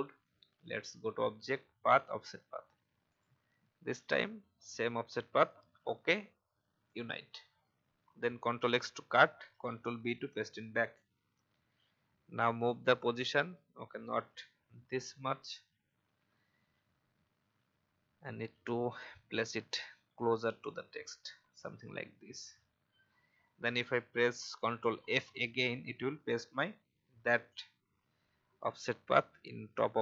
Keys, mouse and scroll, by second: 11.9 Right, 12.6 Down, 14.9 i, 15.7 click, 16.6 alt+scroll up 1, 18.0 alt+scroll up 1, 19.1-21.5 drag, 22.2 alt+scroll down 1, 29.1-30.0 drag.